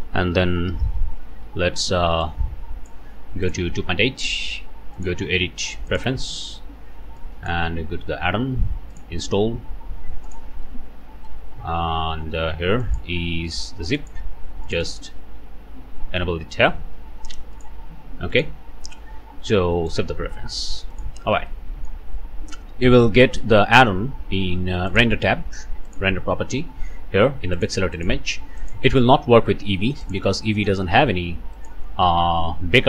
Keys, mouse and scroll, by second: 0.7 ctrl+l, 0.8 ctrl+c, 1.4 Escape, 2.2 click, 3.5 click, 4.9 click, 5.9 click, 7.2 click, 8.9 click, 10.2 ctrl+click, 11.0 ctrl+v, 11.2 ctrl+Return, 12.8 click, 13.9 click, 14.6 click, 17.5 click, 18.3 click, 19.9 click, 20.9 click, 21.6 middle click, 24.9 middle click, 25.9 middle click, 27.5 middle click, 27.9 click, 30.0-31.1 drag, 31.5 click.